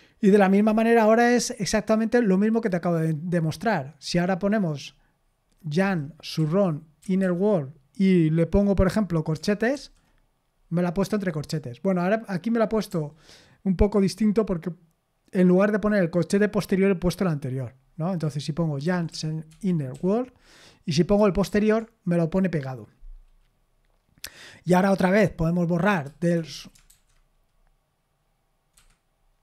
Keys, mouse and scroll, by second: 5.8-7.7 typing, 12.9 u, 18.6-20.4 typing, 21.4 ], 25.8-27.4 typing, 28.7 Escape.